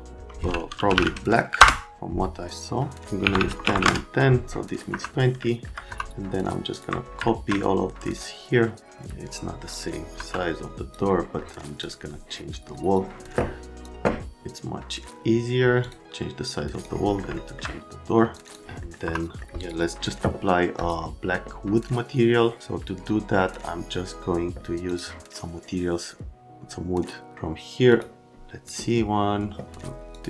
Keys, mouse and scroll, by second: 0.6-1.5 typing, 1.6 Return, 3.2 KP_1, 3.3 KP_0, 3.5 Tab, 3.6 KP_1, 3.7 KP_0, 3.8 KP_Enter, 4.8 middle click, 4.9 F3, 5.4 alt+right click, 5.9 F3, 6.7 click, 7.2 alt+middle click, 9.9 click, 10.1 F3, 15.8 click, 16.0 click, 17.3 alt+middle click, 18.3 click, 18.5 click, 18.8 middle click, 19.0 F3, 19.4 right click, 20.8 click, 24.9 click, 27.9 click, 30.1 click.